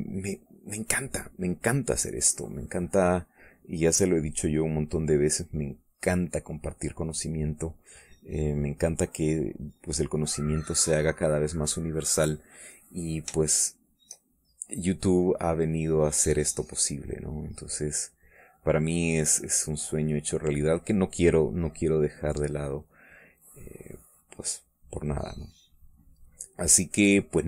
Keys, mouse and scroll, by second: 1.3 middle click, 3.4 click, 4.8-8.8 drag, 8.9 click, 9.9-11.1 drag, 11.5 middle click, 12.0 middle click, 12.5 middle click, 13.0 click, 14.4 shift+click, 15.7 middle click, 16.5 click, 17.2-19.4 drag, 22.2 middle click, 24.2-27.4 drag.